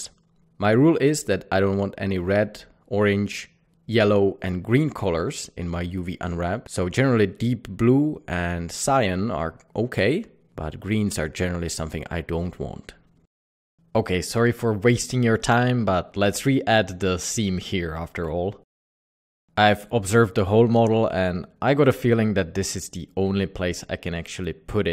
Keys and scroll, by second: 3.1 u, 4.2 typing, 9.8 Tab, 10.3 typing, 10.8 Tab, 11.4 typing.